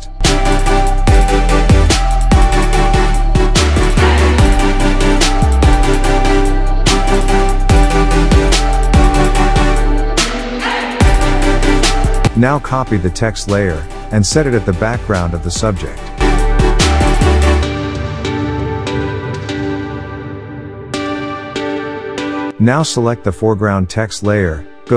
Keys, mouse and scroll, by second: 0.0-0.3 typing, 1.0 click, 1.6 Return, 2.7 click, 4.5 ctrl+t, 5.1-10.7 drag, 12.4 ctrl+j, 13.3-14.1 drag, 16.2 click, 18.0 click.